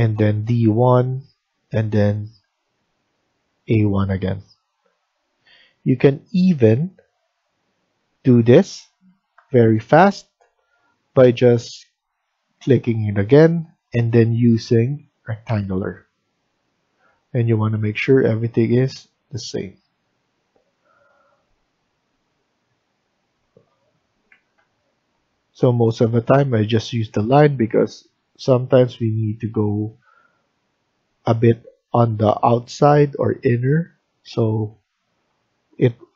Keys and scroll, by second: 5.5 Escape, 7.1 Escape, 8.0 Tab, 9.3 Delete, 24.2 Escape, 24.5 Escape.